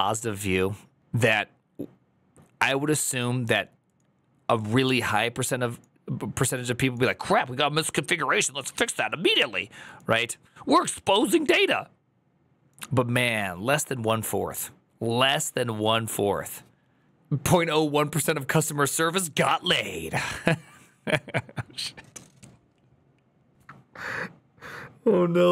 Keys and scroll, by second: 15.3 alt+[.